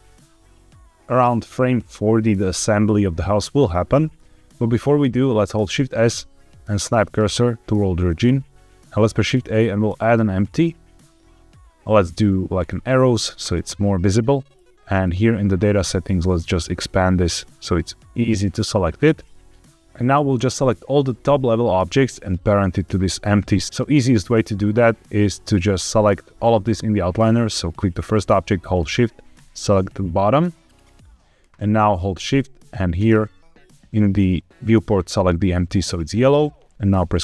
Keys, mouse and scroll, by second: 4.0 scroll down 1, 4.3 shift+s, 5.7 shift+s, 8.9 shift+a, 14.8 click, 15.7-18.8 drag, 19.0-19.5 scroll down 3, 19.5 middle click, 19.5 scroll up 2, 26.3-29.3 drag, 32.8 shift+click, 37.1 ctrl+p.